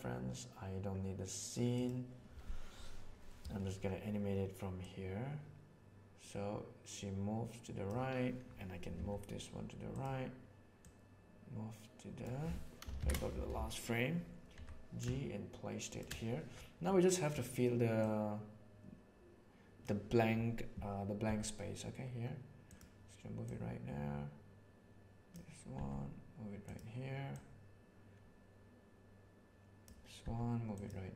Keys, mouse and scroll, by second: 1.7 right click, 4.7-7.8 right drag, 8.9 g, 10.8-12.2 right drag, 13.0 shift+Right, 14.5 g, 16.8 middle click, 18.0-19.8 right drag, 21.2 g, 23.4-24.6 drag, 24.6 right click, 25.7 g, 27.3-28.1 right drag, 28.1-29.8 drag, 30.2 g.